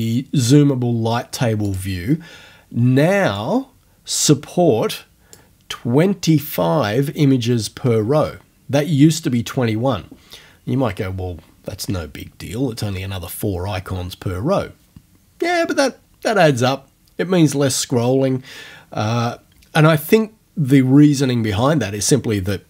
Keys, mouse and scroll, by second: 1.7 click, 3.4-6.8 drag.